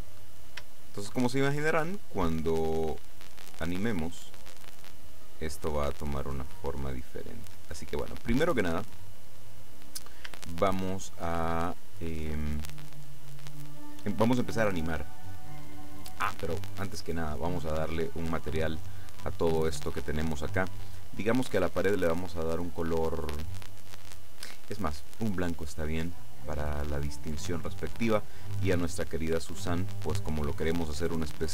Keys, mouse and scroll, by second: 0.3-0.8 scroll down 3, 0.8 shift+middle click, 2.3-9.8 drag, 10.0-10.5 scroll up 1, 10.9-12.1 shift+middle drag, 12.3-12.9 scroll up 2, 16.8 right click, 18.1 click, 19.3 click, 21.4 click, 25.0-25.6 scroll up 1, 26.7 right click, 29.5 click.